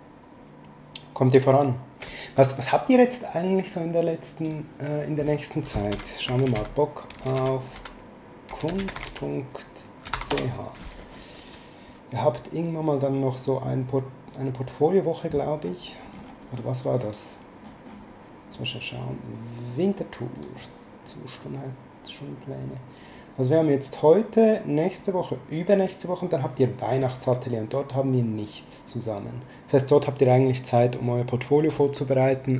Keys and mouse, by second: 3.7 click, 5.7-10.1 typing, 10.3 Return, 10.3 KP_Enter, 20.3 click.